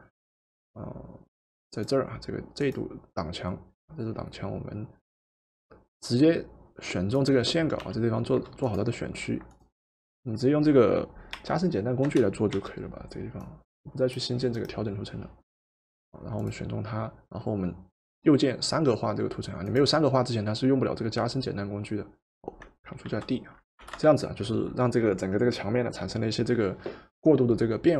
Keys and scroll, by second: 7.8 w, 11.4 o, 12.6 o, 23.1 ctrl+d, 23.9 v.